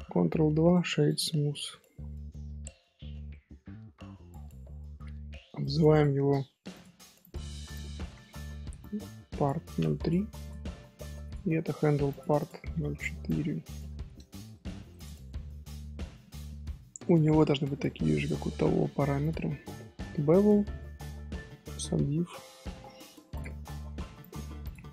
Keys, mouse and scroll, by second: 3.3-5.6 middle drag, 5.6 click, 6.7 click, 7.2 click, 7.7-10.1 drag, 10.4 click, 10.6-11.2 middle drag, 11.2 click, 12.0 click, 12.3-15.0 drag, 15.7-18.1 shift+middle drag, 18.1 click, 19.2 click, 23.3 click, 24.2 click.